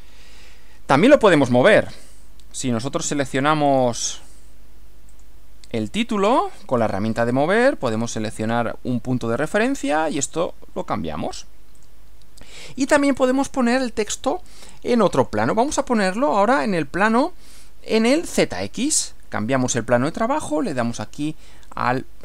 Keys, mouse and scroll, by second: 3.7 click, 5.2 click, 7.2 click, 9.4 click, 11.8 click, 13.2 click, 14.1-15.4 middle drag, 15.6-16.8 middle drag, 19.6 click, 21.8 click.